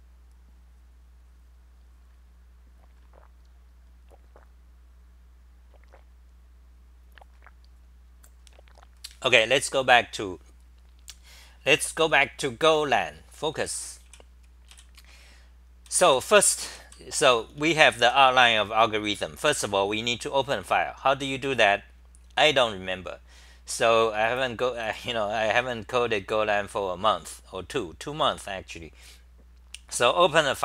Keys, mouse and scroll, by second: 9.8-10.5 typing, 13.6 Home, 13.6 w, 15.8 d, 17.0-18.5 typing, 19.5 ctrl+g.